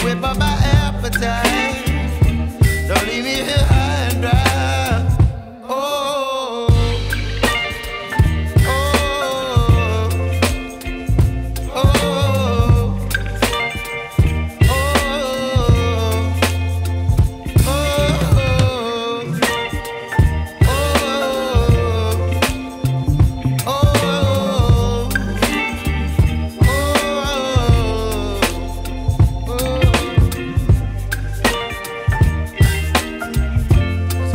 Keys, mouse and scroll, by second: 6.6 3, 6.8 Tab, 7.2 3, 25.4 3, 28.5 double click, 28.6 ., 29.8 BackSpace, 30.4 7, 30.6 5, 30.7 Return.